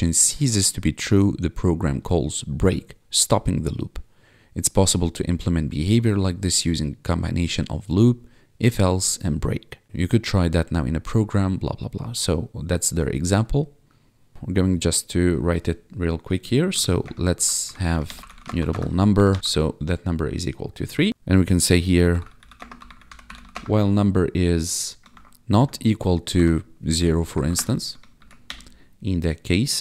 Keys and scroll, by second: 14.3 Tab, 16.7-19.1 typing, 19.4 ctrl+s, 20.9-23.9 typing, 25.1 shift+1, 25.5 =, 26.3 0, 27.2 Left, 27.4 Right, 28.1 shift+[, 28.4 Return.